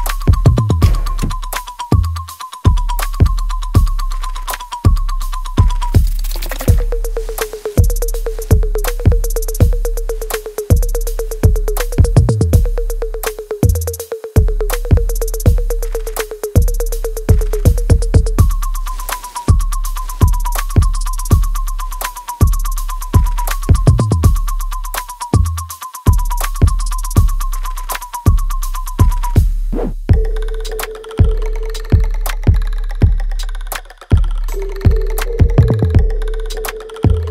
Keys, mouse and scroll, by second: 0.6 alt+right click, 1.6 click, 2.0 alt+right click, 2.4-5.8 alt+drag, 5.8 alt+middle click, 7.0-8.7 alt+right drag, 8.7 right click, 9.9 click, 11.7 alt+right click, 12.6 alt+middle click, 15.0-17.8 drag, 18.3-21.5 drag, 21.8 right click, 21.8-23.1 alt+right drag, 23.1 alt+click, 23.9 alt+middle click, 24.6 alt+right click, 25.6 click, 26.9 g, 28.0 click, 29.0 g, 29.4-30.1 scroll down 1, 30.4 alt+middle click, 31.1 alt+right click, 32.0 click, 33.2 g, 33.8 alt+right click, 34.3 alt+click, 35.2 alt+middle click, 35.6-37.0 alt+right drag, 37.0 click.